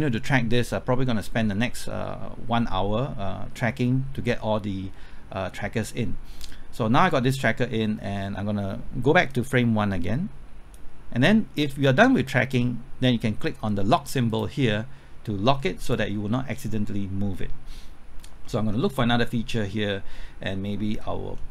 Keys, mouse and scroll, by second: 18.2 scroll up 1, 18.4 middle click, 19.3 scroll up 1, 19.7 middle click, 20.2 scroll up 1, 20.5-21.5 middle drag.